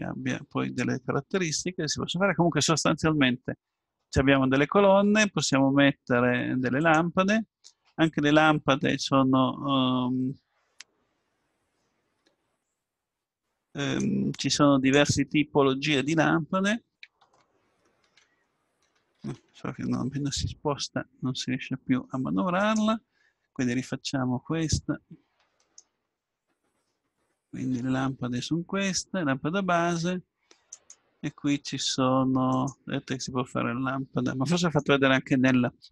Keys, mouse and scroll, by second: 0.0 scroll up 1, 0.1-5.0 middle drag, 5.4-8.7 drag, 14.0-15.7 drag, 18.9 ctrl+z, 19.2 ctrl+z, 22.6-24.3 drag, 30.7-35.9 drag.